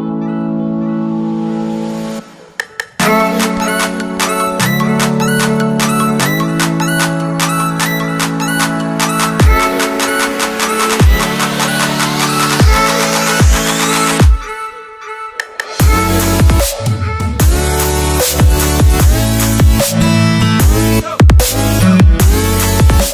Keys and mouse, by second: 2.2 click, 2.6 shift+a, 5.9-6.8 typing, 7.9 x, 9.1 y, 9.7 KP_Enter, 9.7 x, 14.1-15.6 middle drag, 16.3 g, 17.3 x, 18.3 click, 21.0 typing, 22.5 s.